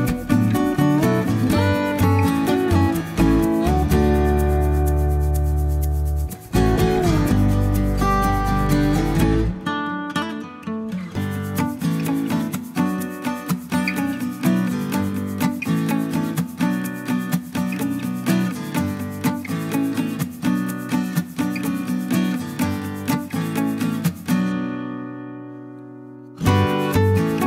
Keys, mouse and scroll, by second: 1.0 scroll down 1, 2.6 click, 4.4 click, 6.9 click, 8.2 click, 9.8 click, 13.8 click, 14.2 click, 15.5 click, 16.9 click, 23.7 click, 26.1 click.